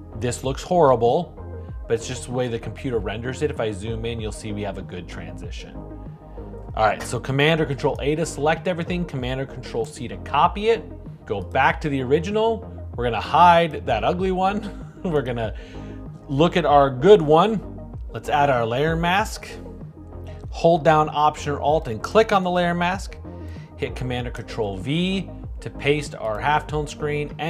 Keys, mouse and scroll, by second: 6.9 super+a, 10.0 super+c, 21.4-24.7 alt+drag, 25.0 super+v.